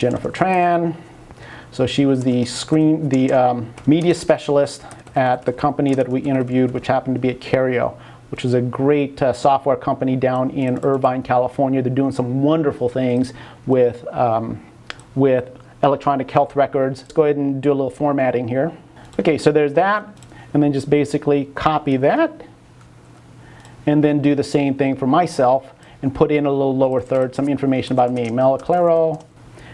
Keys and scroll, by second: 23.1 super+v, 28.1-29.5 typing.